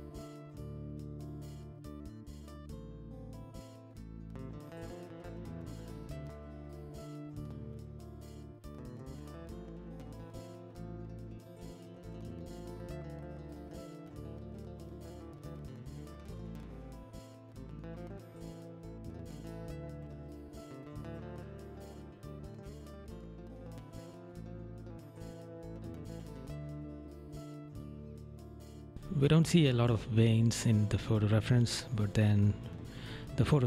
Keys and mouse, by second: 1.5 right click, 2.3 right click, 3.5 right click, 5.2 right click, 6.8 right click, 7.1 right click, 7.5 right click, 8.1 right click, 8.8 right click, 10.8 right click, 11.5 right click, 12.0 right click, 13.6 right click, 14.5 right click, 15.4 right click, 16.1 right click, 17.0 right click, 18.4 right click, 19.8 right click, 20.7 right click, 21.3 right click, 21.9 right click, 22.9 right click, 23.4 right click, 25.0 right click, 25.6 right click, 26.3 right click, 28.2 right click, 29.5 right click, 31.1 right click, 31.6 right click, 32.1 right click, 32.9 right click.